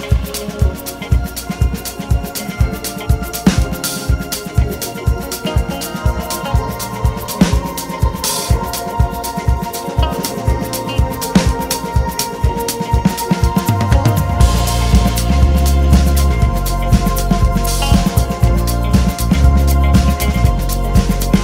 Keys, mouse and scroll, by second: 0.0 click, 1.3 a, 2.7 alt+a, 3.3 c, 4.1 click, 4.2 alt+a, 6.0 2, 6.2 click, 7.1 ctrl+z, 7.5 scroll up 1, 7.8 `, 8.7 scroll down 1, 9.2 KP_1, 9.7 Tab, 10.1 scroll up 1, 10.6 alt+a, 11.5-11.9 scroll down 1, 11.9-12.4 scroll up 1, 12.4 `, 13.4-14.2 scroll up 2, 14.2-14.5 scroll down 1, 14.5 click, 14.9 KP_Decimal, 15.3 `, 17.1 1, 17.7 click, 18.3 shift+click, 18.9 j, 19.4 alt+a, 19.6 click, 20.9 alt+s.